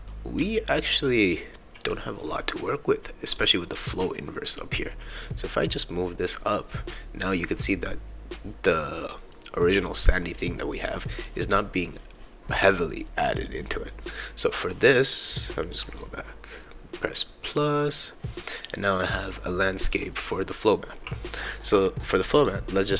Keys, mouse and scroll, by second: 0.1-1.8 right drag, 0.4 s, 3.3 click, 7.3-9.3 right drag, 10.3 right click, 13.4 click, 15.7 click, 17.5 click, 19.9 click, 22.2 click, 22.4 click.